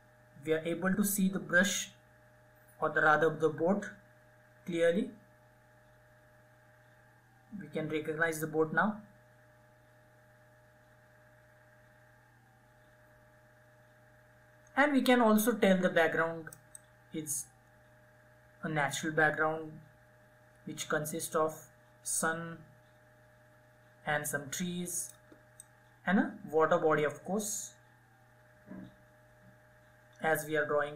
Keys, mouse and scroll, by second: 16.2-30.9 drag.